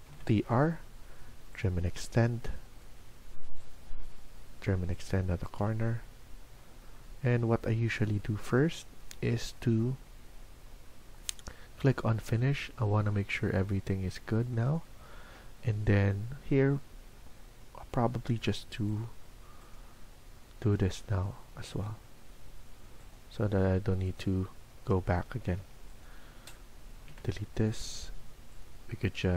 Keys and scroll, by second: 0.0-0.5 typing, 25.2 Escape, 25.5 Escape, 27.0 Delete.